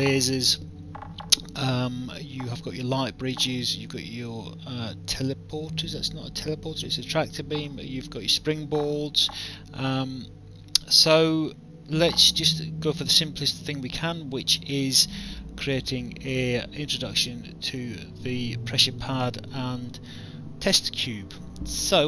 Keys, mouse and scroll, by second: 16.0 alt+click, 19.0 alt+click.